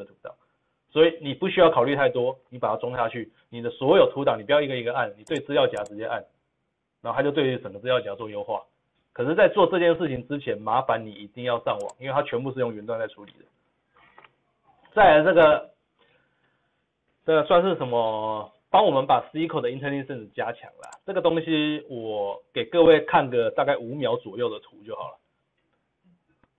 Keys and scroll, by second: 11.9 ctrl+v, 11.9 ctrl+z.